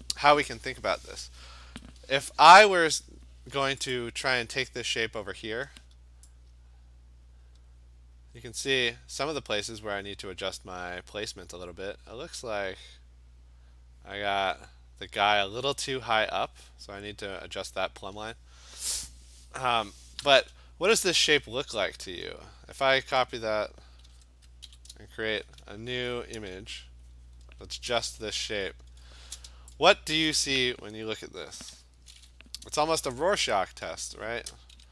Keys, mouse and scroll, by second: 1.9 v, 3.1 Escape, 4.0 click, 9.1 click, 20.3 shift+click, 22.9 ctrl+a, 24.1 ctrl+c, 24.1 ctrl+v, 24.7 ctrl+n, 26.5 Return, 27.9 ctrl+v, 28.5-29.2 scroll, 30.4 click, 31.7 b, 33.0 ], 33.1-33.8 ], 34.1 ], 34.8 d.